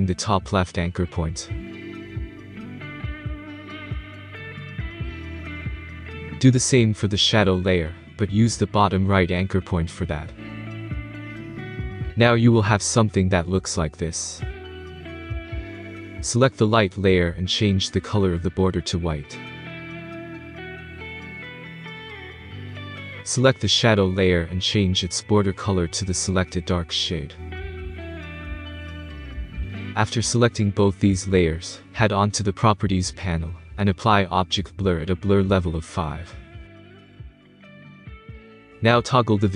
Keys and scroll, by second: 37.5 5, 38.1 Return.